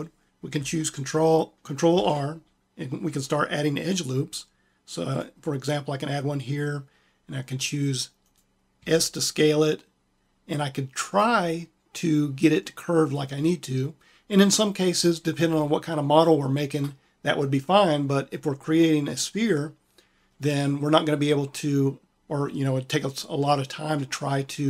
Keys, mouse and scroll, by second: 1.8 ctrl+r, 8.6 s, 16.1-18.5 drag.